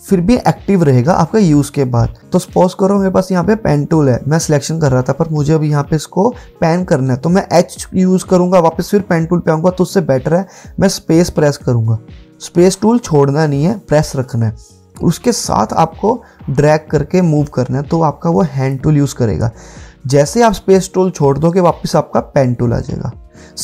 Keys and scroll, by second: 2.2 p, 11.6-13.6 typing, 18.0 typing.